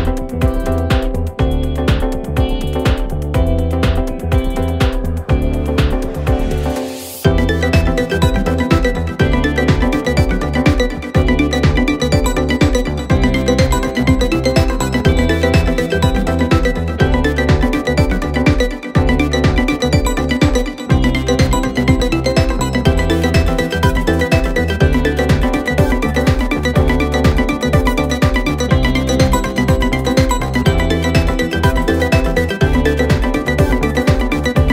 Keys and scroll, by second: 3.6 3, 4.2 ], 4.9 ], 5.6 ., 8.2 ], 8.5 ], 10.8 4, 16.3 3, 16.7 Delete, 17.1 Delete, 17.5 4, 25.2 2, 30.6 3, 31.1 4, 33.5 1.